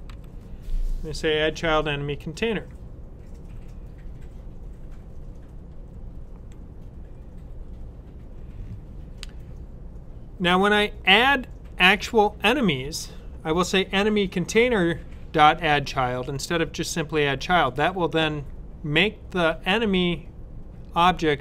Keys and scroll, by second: 0.0-0.5 typing.